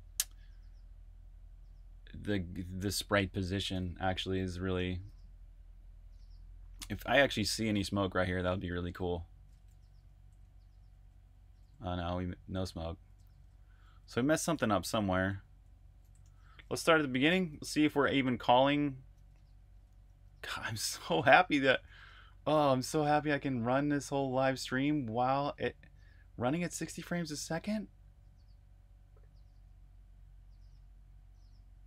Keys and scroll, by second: 4.7 super+r, 5.1 super+h, 5.7 super+h, 9.4-15.9 typing, 16.1 super+q, 17.1 super+Tab, 18.5 super+?, 19.1 super+Tab, 20.0 super+q, 21.7 shift+super+Tab, 22.0 shift+super+Tab.